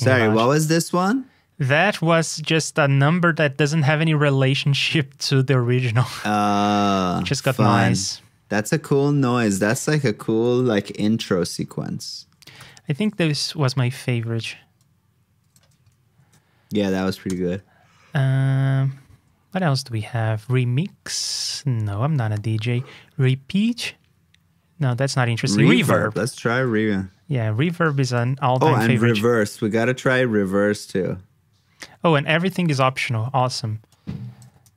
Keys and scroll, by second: 7.3 super+Tab, 16.0 alt+shift+Down, 17.4 super+Tab, 26.3 super+c, 26.5 super+Tab, 28.5 super+v, 29.1 super+Tab, 32.7 super+Tab, 34.6 super+c.